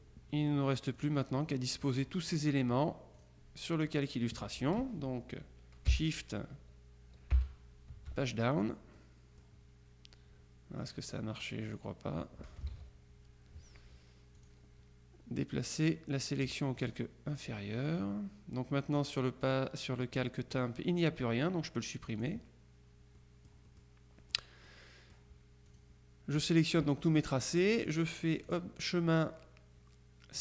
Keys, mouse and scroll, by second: 0.4 click, 1.4 click, 3.2 click, 7.4 shift+Page_Down, 9.0 click, 10.9 click, 11.8-13.2 drag, 12.8 ctrl+z, 14.5 click, 16.9 click, 19.0-20.1 drag, 20.6 click, 22.3 click, 23.3-24.4 drag, 24.8 click, 25.8 click, 26.9 middle click, 28.5 click.